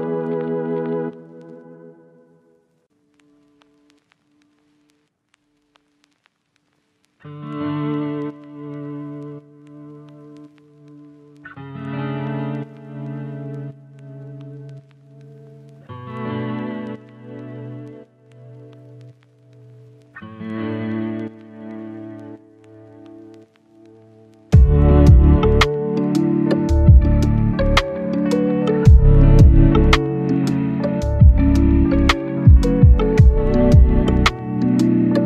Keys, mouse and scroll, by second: 0.7 scroll down 1, 0.9-1.7 scroll up 3, 0.9 right click, 1.3 right click, 1.7 scroll down 1, 1.8 scroll up 1, 1.8 right click, 1.9 scroll down 1, 2.0 scroll up 1, 2.3 right click, 2.6 scroll up 1, 2.7 right click, 3.0 click, 3.9 scroll down 1, 4.0 scroll up 1, 4.0 right click, 4.5 scroll down 1, 4.6 scroll up 1, 4.6 right click, 5.0 scroll down 1, 5.1 scroll up 1, 5.2 right click, 6.0 scroll up 1, 6.0 right click, 6.5-6.8 scroll down 2, 6.6 right click, 6.9 right click, 7.1 scroll up 1, 7.1 right click, 8.3 scroll down 1, 8.4 right click, 8.8 click, 9.2 right click, 11.9 scroll down 1, 12.1-12.6 scroll up 2, 12.2 right click, 12.6 right click, 13.4 click, 14.2 right click, 14.5 scroll down 1, 14.6-15.2 scroll up 1, 15.2 click, 18.1-21.1 right drag, 21.2 scroll up 1, 21.5 right click, 22.1 scroll up 1, 22.3 right click, 22.7 scroll down 1, 22.8 right click, 23.2 scroll down 1, 23.3-24.4 scroll up 2, 23.4 right click, 24.4 right click, 24.8 scroll up 1, 25.0 right click, 25.4 scroll down 1, 25.5 right click, 26.1-26.7 scroll up 1, 26.7 click, 27.1 right click, 27.4 scroll up 1, 27.6 right click, 27.7 scroll down 1, 27.8 scroll up 1, 27.9 right click, 28.5-29.1 scroll up 1, 29.1 click, 30.5 right click, 30.8 scroll down 1, 30.9 scroll up 1, 31.0 right click, 31.5-35.0 drag, 35.1 right click.